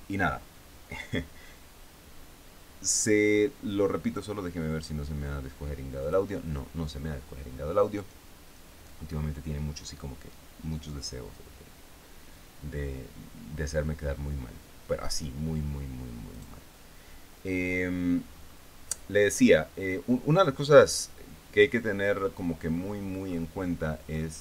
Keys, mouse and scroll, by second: 4.5 click, 6.5 click, 16.8 right click, 18.8-19.4 scroll up 4, 19.5-20.7 scroll down 2, 21.2-21.8 scroll down 2, 22.5-24.0 scroll up 6.